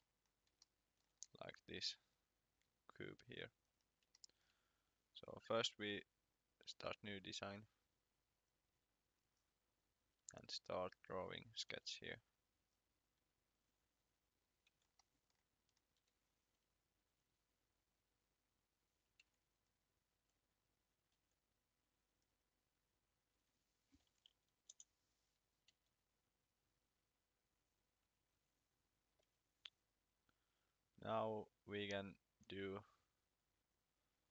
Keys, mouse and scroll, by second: 0.1 scroll up 2, 1.1 scroll down 2, 3.3-4.0 scroll up 1, 4.0 shift+scroll up 1, 4.1 shift+middle click, 6.3 click, 11.1 scroll, 11.7 c, 12.6 click, 14.4 scroll up 1, 14.7 Escape, 15.0 middle click, 15.6-15.9 scroll down 1, 15.9 l, 17.1 click, 19.2 Escape, 19.7 click, 20.1 x, 21.1 d, 22.3 click, 24.0 5, 24.3 0, 24.7 Return, 25.7 c, 26.6 click, 28.1 Escape, 29.2 l, 30.7 click.